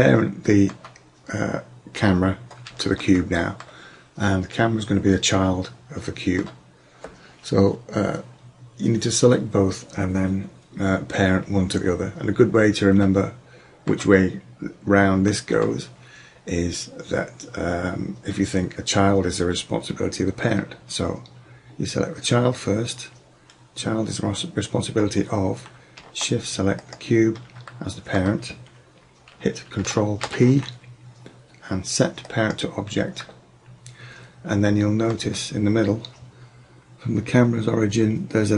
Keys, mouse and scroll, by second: 0.6-2.9 middle drag, 3.4 middle click, 13.1 middle click, 15.8-17.3 drag, 26.9-27.7 drag, 27.7 middle click, 30.2 ctrl+p, 33.4-34.6 middle drag, 35.7-37.3 middle drag.